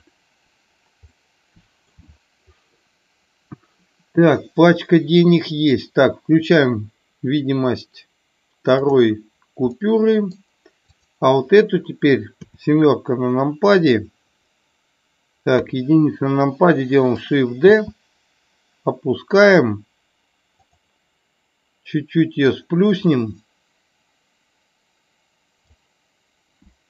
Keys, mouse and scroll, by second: 1.1-1.8 middle drag, 2.7-5.7 middle drag, 9.7 middle click, 10.8 click, 12.4 KP_7, 15.6 KP_1, 17.7 shift+d, 22.6-25.7 drag.